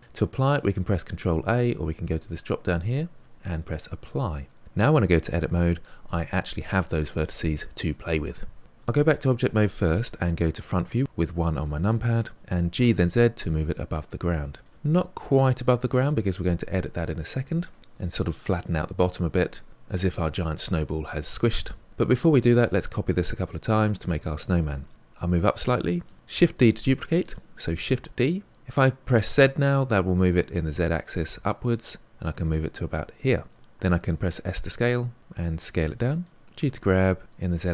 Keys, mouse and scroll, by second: 2.0-4.9 drag, 5.2 Tab, 8.6 Tab, 10.7 KP_1, 12.3 g, 14.7-17.8 scroll up 4, 24.8-26.1 shift+middle drag, 26.3 shift+d, 33.7 s, 36.4 g.